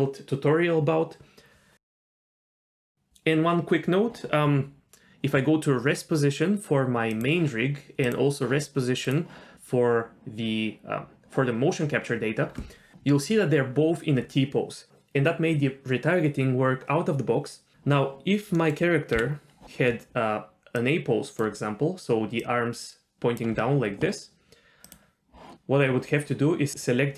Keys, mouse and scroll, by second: 4.9 ctrl+z, 4.9 click, 7.1 click, 8.0 click, 9.6 click, 18.6 middle click, 19.1-22.0 typing, 21.4-21.8 drag, 23.3-23.8 drag, 23.3 d, 23.8 d, 24.8 click, 25.8 click.